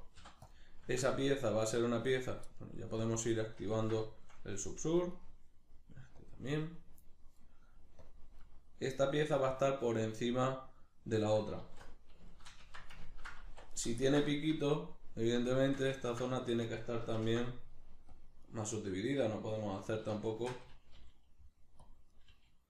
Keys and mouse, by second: 0.2 p, 1.3 right click, 2.1 right click, 3.0 click, 3.7-5.1 ctrl+middle drag, 5.1 right click, 6.2 click, 7.0 right click, 8.0-11.6 drag, 11.6 alt+q, 12.3-13.7 shift+middle drag, 12.6 Tab, 13.5 1, 13.7 right click, 14.1-18.6 ctrl+shift+middle drag, 17.2 ctrl+r, 19.1 right click, 20.3 shift+Tab, 20.9 g, 21.9 click, 22.1 right click, 22.3 g.